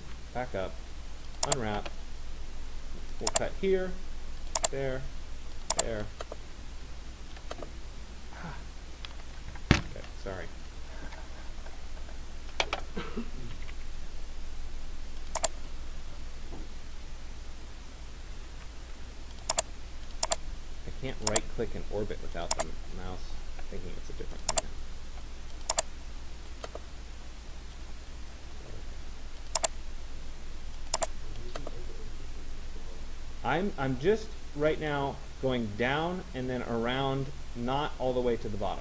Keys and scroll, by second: 18.1 ctrl+z.